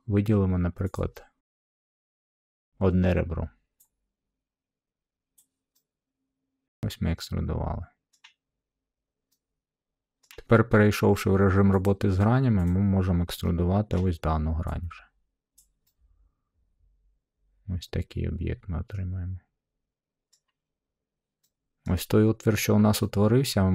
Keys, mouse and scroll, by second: 0.9 click, 2.0 middle click, 5.3-6.4 drag, 8.0-9.2 middle drag, 10.2-11.2 middle drag, 11.8-13.8 drag, 13.8-15.0 middle drag, 15.5 click, 16.0 click, 20.2 middle click, 21.3 middle click, 21.8-22.9 middle drag.